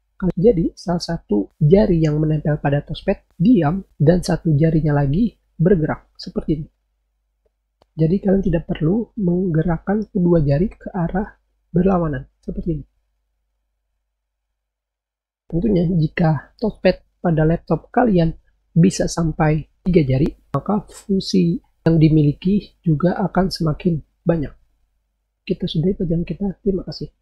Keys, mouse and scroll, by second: 6.9 scroll down 2, 10.5 scroll up 2, 11.9-12.6 scroll down 6, 12.9-13.2 scroll up 4, 13.8-14.6 scroll down 4.